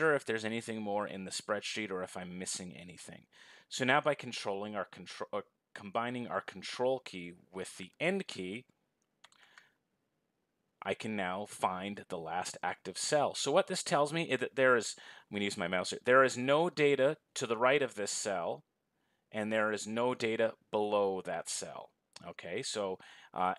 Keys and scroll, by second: 8.9 ctrl+End.